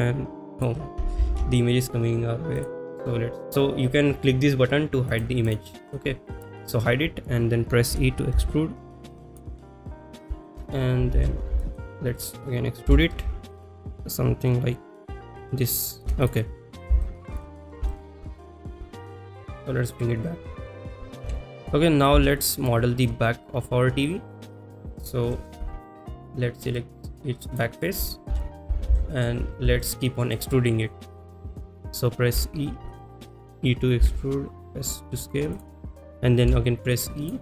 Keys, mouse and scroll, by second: 0.6 click, 2.6 ctrl+z, 2.6 click, 3.5 click, 5.1 click, 5.5 click, 5.9 click, 6.3 click, 6.7 click, 9.3 shift+click, 9.3 e, 9.6 shift+middle click, 11.3 ctrl+z, 11.6 shift+middle click, 12.2 middle click, 14.5 shift+e, 16.0 shift+click, 17.1 shift+middle click, 17.5 middle click, 17.9 shift+middle click, 19.9 click, 21.3 KP_3, 22.4 shift+middle click, 24.4 middle click, 25.3 KP_3, 26.8 middle click, 29.1 shift+middle click, 29.6 middle click, 29.9 click, 29.9 middle click, 33.1 click, 33.1 e, 35.6 click, 35.6 s, 37.3 click, 37.3 e.